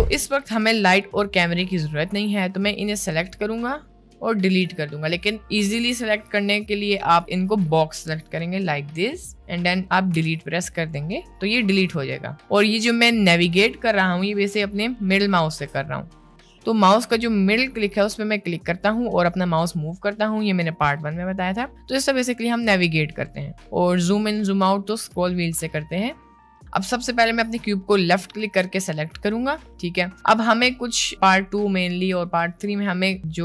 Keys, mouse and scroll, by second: 3.6 click, 7.3-8.6 drag, 10.1 Delete, 11.6 middle click, 12.8 middle click, 17.8-23.3 middle drag, 24.1 middle click, 26.7 click, 30.5 click.